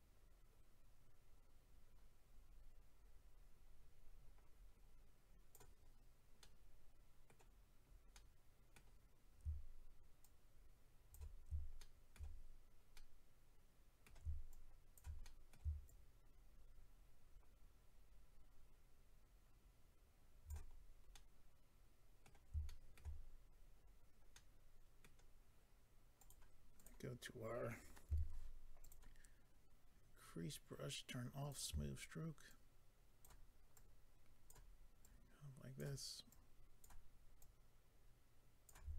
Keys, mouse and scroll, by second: 5.8-6.4 scroll down 3, 6.4 middle click, 10.2 shift+click, 11.8 shift+middle click, 12.9 middle click, 14.5 shift+click, 15.2 middle click, 15.8 shift+click, 20.7-21.1 scroll down 2, 21.1 middle click, 22.6 shift+middle click, 23.2 scroll down 1, 23.2-24.3 scroll up 5, 24.3 middle click, 26.2 click, 26.3 click, 26.7 click, 26.8 double click, 28.1 f, 28.8 click, 31.4 click, 32.4 ctrl+click, 33.7 ctrl+click, 35.0 ctrl+click, 36.3 ctrl+click, 37.4 ctrl+click.